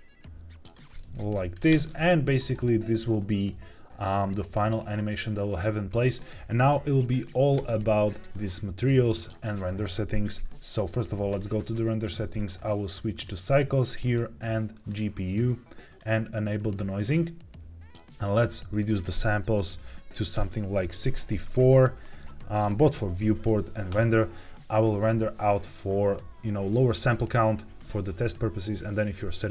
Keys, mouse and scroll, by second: 0.6 click, 0.8 middle drag, 1.4 click, 1.6 space, 2.4-3.4 scroll up 3, 3.4-4.5 middle drag, 4.5-5.5 scroll down 2, 7.5 space, 11.2 click, 12.3-13.3 drag, 13.9-14.8 drag, 15.8 click, 16.9 click, 18.6-21.4 drag, 21.6-23.8 drag.